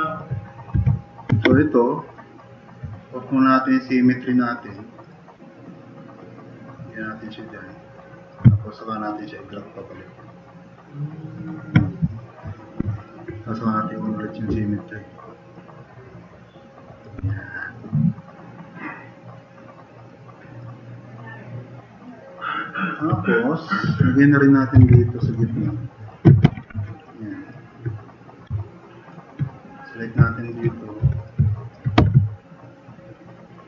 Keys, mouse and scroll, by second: 0.8 e, 22.8 click, 24.5-27.0 typing, 27.0 drag, 31.0 f, 31.5 click, 32.0 e, 32.5-32.9 drag, 33.4-33.6 drag.